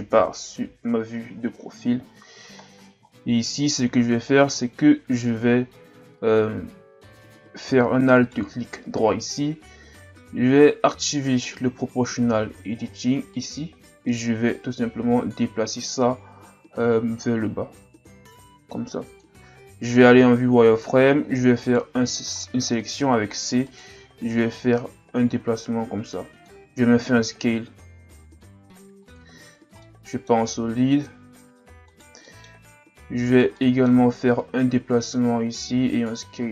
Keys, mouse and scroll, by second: 0.1 KP_1, 0.9 KP_3, 1.6-2.6 scroll up 2, 2.6-3.1 ctrl+scroll down 1, 3.1-4.1 scroll up 1, 8.2 alt+right click, 13.3 click, 14.5 click, 20.0 z, 21.6 right click, 21.9 c, 24.4 click, 27.2 s, 29.3 z, 29.6 scroll down 2, 29.8-31.9 middle drag, 31.9 right click, 32.3 middle click, 32.7-33.2 scroll up 1, 33.2 shift+right click, 33.5 scroll up 1, 33.5 middle click, 34.4 click, 36.0 s.